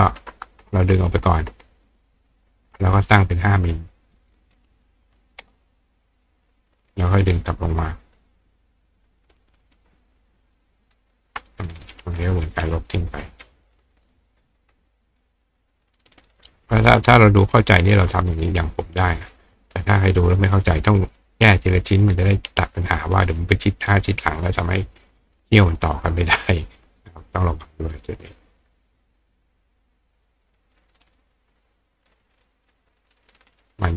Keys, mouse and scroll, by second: 1.5 ctrl+click, 4.1 click, 6.2 click, 6.9-8.0 drag, 9.6-10.9 ctrl+drag, 11.3 click, 11.8-13.1 drag, 13.7-14.4 drag, 15.3-16.4 drag, 17.6-19.3 ctrl+drag, 19.1 right click, 20.0 click, 21.0-22.3 drag, 22.1 right click, 25.1 click, 25.3 click, 25.5 click, 26.7 click, 27.1 click, 27.3 click, 29.2 click, 31.1 click, 32.3 click, 33.1-33.9 drag.